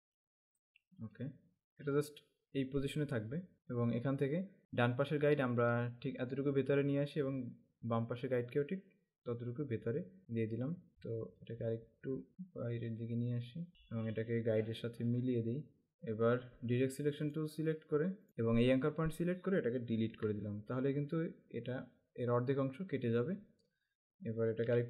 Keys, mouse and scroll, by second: 5.5 alt+scroll up 1, 11.2-12.2 alt+scroll up 2, 12.3 click, 13.7 alt+scroll up 1, 15.3 click, 15.9 space, 17.4 click, 18.3 z, 19.3 click, 20.2 Delete.